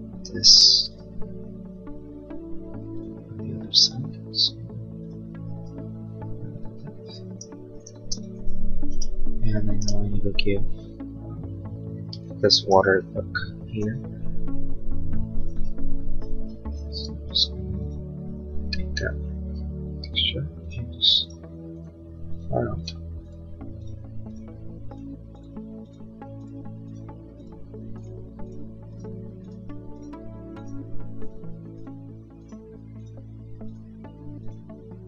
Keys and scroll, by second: 7.9 space, 16.3 b.